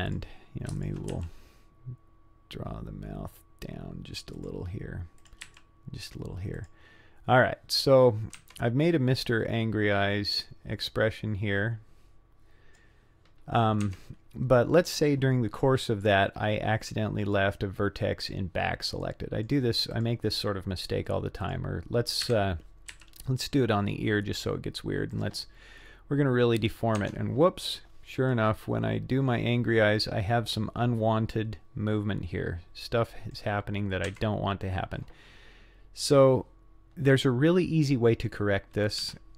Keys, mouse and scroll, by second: 0.1 click, 0.8 shift+click, 1.1 g, 5.2 click, 5.5 g, 8.4 Tab, 10.4-12.8 drag, 13.8 Tab, 16.9-17.6 middle drag, 18.2 click, 19.1 middle click, 19.9 click, 21.4 click, 22.3 KP_1, 22.9 g, 27.0 Tab, 28.3-33.4 drag, 34.1 Tab, 36.1-36.7 scroll down 2, 36.7-37.4 scroll up 3, 37.4 scroll down 1, 39.0 z.